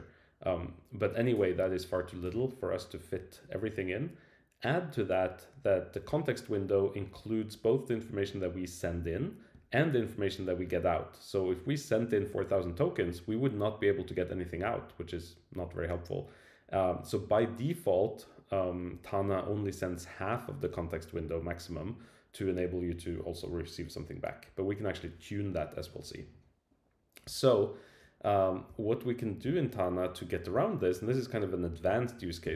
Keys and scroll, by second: 28.7 Left, 29.4 Return.